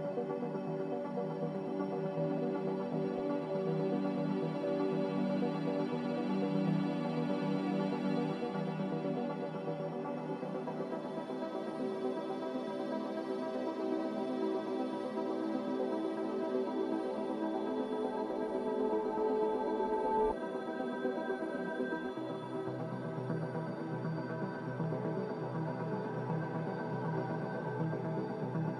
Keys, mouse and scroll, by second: 10.1 g, 12.2 a, 14.9 Delete.